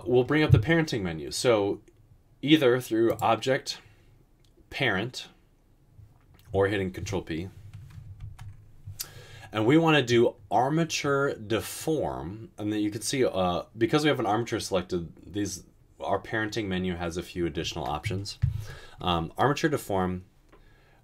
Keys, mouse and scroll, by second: 8.3 ctrl+p.